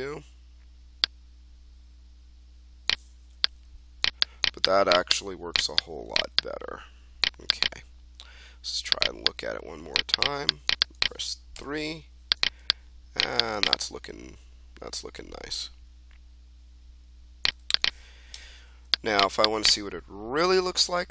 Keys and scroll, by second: 11.5 3, 18.3 1, 20.7 ctrl+d.